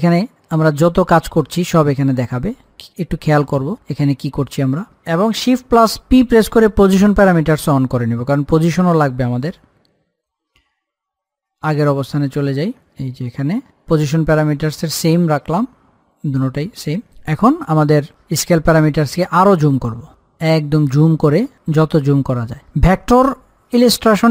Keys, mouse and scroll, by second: 5.3 click, 6.4 shift+p, 9.6 click, 15.7 click, 18.7-20.5 drag, 20.5-21.5 scroll down 1, 21.9-24.3 shift+drag.